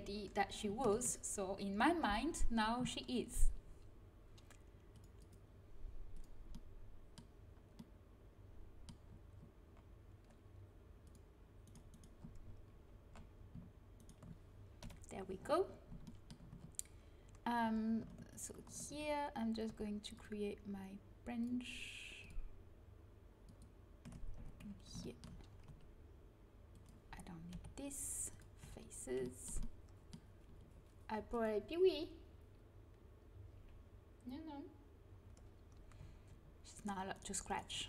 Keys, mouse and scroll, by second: 0.7 ctrl+KP_Add, 4.8-8.4 middle drag, 8.4 click, 10.9-12.2 drag, 11.5 right click, 14.7 KP_1, 18.3 click, 18.8 ctrl+e, 19.6 ctrl+z, 24.3 z, 24.6 click, 25.6 g, 27.4 Delete, 28.5 z, 31.2-33.2 drag, 36.7-37.8 right drag.